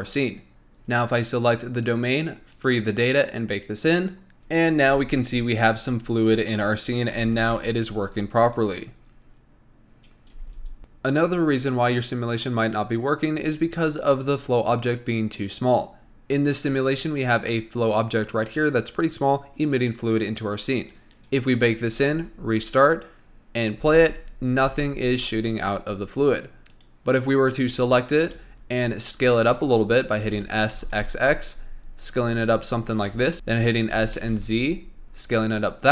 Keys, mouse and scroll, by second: 1.4 click, 2.9 click, 3.9-5.0 drag, 5.3 space, 6.3 scroll down 2, 6.8-8.9 middle drag, 8.9 drag, 10.6 space, 16.3-17.7 scroll up 1, 17.7-20.7 middle drag, 21.0-23.3 drag, 24.0 space, 24.8 space, 26.9 click, 28.4 KP_1, 29.2-29.7 scroll up 2, 29.7 shift+middle drag, 30.0-30.4 scroll up 2, 30.4 s, 33.3 s, 34.1 s.